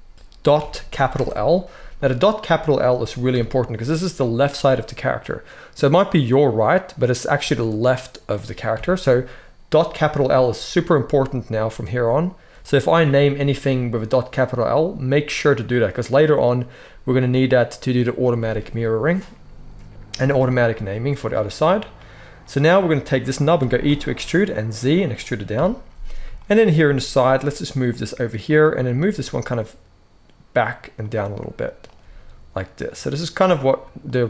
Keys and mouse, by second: 3.2 KP_1, 8.7 KP_1, 12.6-28.4 middle drag, 14.6 g, 23.5 e, 25.4 KP_3, 26.9 g, 28.4 click, 28.5-31.8 middle drag, 28.6 g, 31.8 click, 31.9-33.2 middle drag, 31.9 g, 33.2 click, 33.3 g, 34.0 middle click.